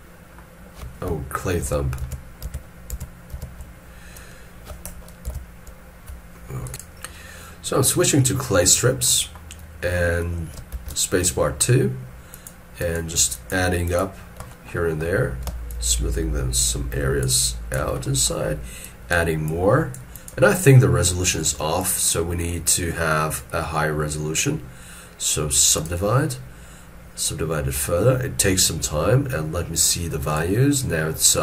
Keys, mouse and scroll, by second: 1.7 ctrl+z, 2.1 ctrl+z, 5.3 ctrl+z, 10.6 space, 12.8 double click, 15.7 shift+click, 17.4 shift+click, 18.0 middle click.